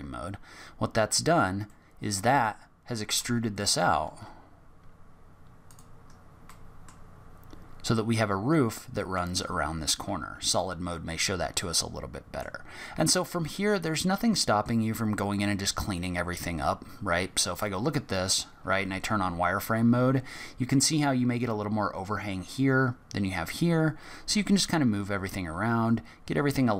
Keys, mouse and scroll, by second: 1.6 middle click, 3.0 Tab, 3.5 middle click, 4.0 z, 6.1 scroll up 1, 6.4 middle click, 9.4 z, 10.5 middle click, 13.3 scroll down 2, 13.8 middle click, 15.0-15.5 scroll down 1, 15.5-16.8 scroll up 1, 16.8 scroll up 1, 17.5 click, 18.3-18.7 scroll down 4, 18.8 scroll up 1, 19.0 z, 24.4 g.